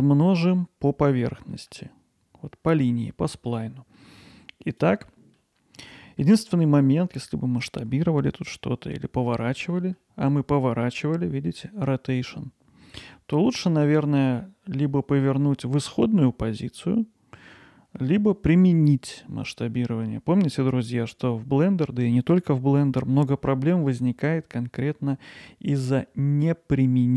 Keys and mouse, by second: 1.0 middle drag, 1.5 middle drag, 3.5-4.0 middle drag, 4.8-5.1 drag, 5.1-5.4 middle drag, 5.9-6.2 middle drag, 9.7-20.4 middle drag.